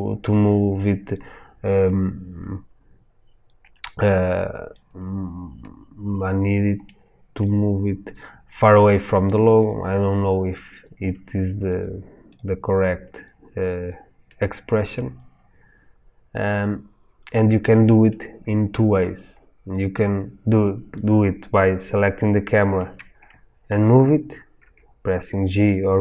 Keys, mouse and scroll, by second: 7.5-8.1 scroll down 2, 8.1-12.3 scroll down 1, 12.3 click, 14.3-26.0 middle drag, 24.6 g.